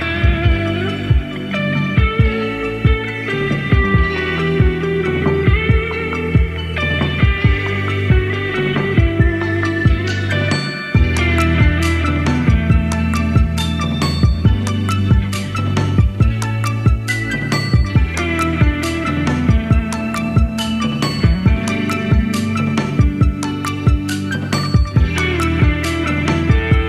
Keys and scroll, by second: 0.9 typing, 2.8-4.1 typing, 5.7 super+d, 10.8 Down, 10.9 Down, 11.0 Down, 11.1 Down, 11.2 Down, 12.8 Right, 13.1 typing, 18.3 super+d.